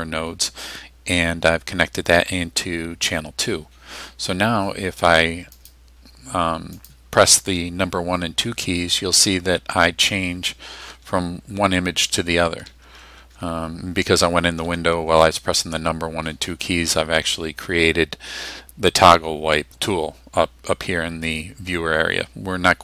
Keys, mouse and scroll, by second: 5.6 click, 6.8 click, 8.8 1, 9.6 2, 10.9 1, 12.0 2, 12.7 1, 13.2 2, 14.6 1.